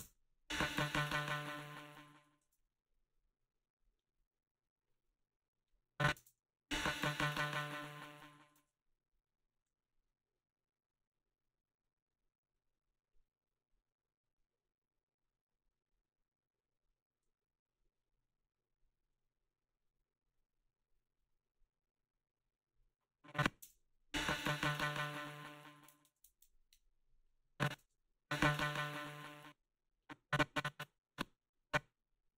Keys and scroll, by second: 0.0 space, 2.5 space, 6.2 space, 8.6 space, 23.6 space, 26.0 space, 27.8 space, 29.2 space.